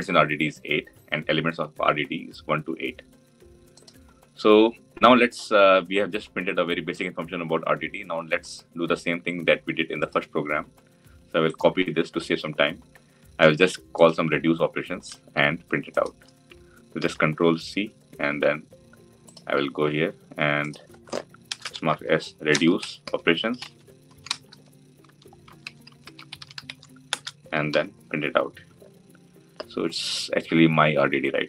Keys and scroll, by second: 16.8 ctrl+c, 27.6 ctrl+v.